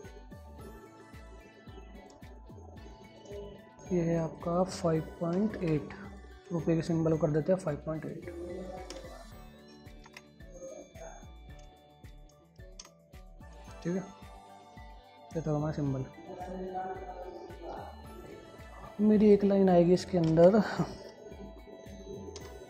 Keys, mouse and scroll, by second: 0.2 scroll down 1, 1.0 click, 1.6 scroll up 1, 2.3 click, 2.7 scroll up 1, 3.0 click, 12.4 click, 13.2 e, 13.6 click, 14.8-16.6 scroll down 1, 18.6 click, 18.8 click, 19.6 ctrl+right click, 20.2 click, 20.6 ctrl+a, 21.8-22.6 typing.